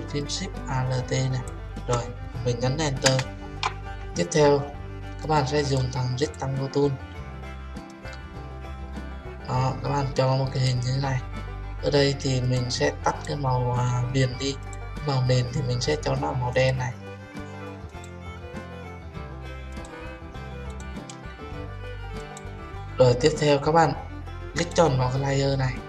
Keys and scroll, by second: 3.1 Return.